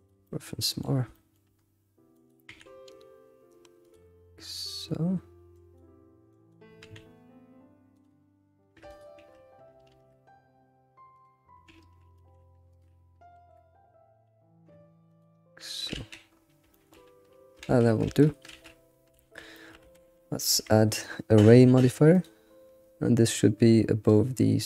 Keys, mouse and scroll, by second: 0.2 shift+middle click, 0.9 scroll down 3, 1.1 shift+middle click, 1.5-2.1 scroll up 3, 2.1 click, 2.5 g, 5.5 click, 6.3 click, 6.8 g, 8.9 alt+click, 9.9 ctrl+alt+shift+s, 12.1 ctrl+alt+shift+s, 13.4 alt+r, 15.9 alt+shift+z, 16.2-16.7 scroll down 6, 16.7-17.6 shift+middle drag, 17.6 ctrl+s, 17.9 scroll down 2, 18.0 alt+shift+z, 18.5 alt+shift+z, 18.9 scroll up 2, 19.1 alt+shift+z, 19.5 shift+middle click, 19.8 Tab, 20.6 q, 23.4-24.4 drag.